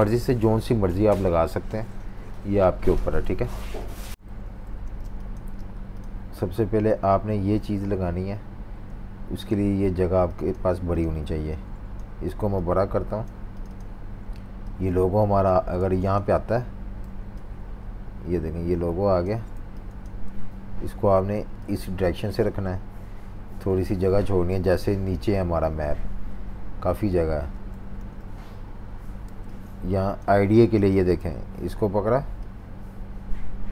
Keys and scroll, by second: 3.2 super+-, 3.8-5.0 typing, 4.1 super+3, 11.2 a, 15.8 super+z, 17.0 v, 19.5-20.2 typing, 24.7 shift+super+-, 27.9 super+3, 29.2-31.1 typing.